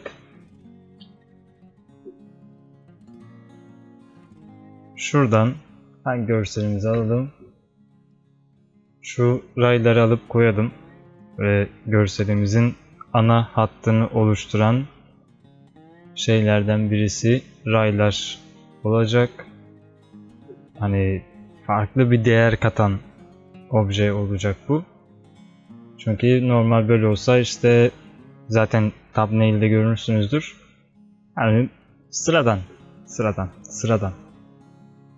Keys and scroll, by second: 0.2 alt+space.